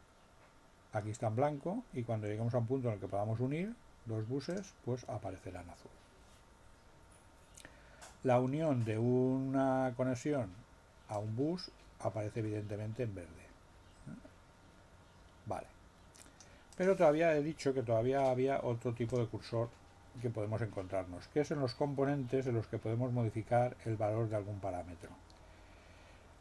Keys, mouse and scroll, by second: 4.4 click, 11.1-16.6 drag, 16.7 click, 19.0 click.